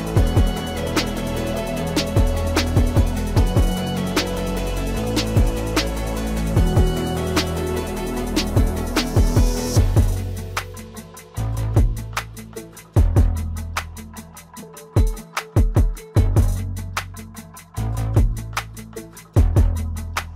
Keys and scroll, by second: 14.6 F3.